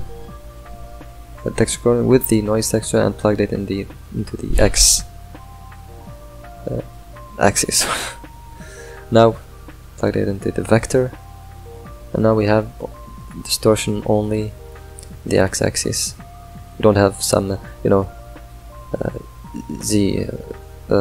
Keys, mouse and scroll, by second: 1.2 click, 2.3 drag, 3.4-9.1 middle drag, 9.1 click, 14.7-21.0 drag.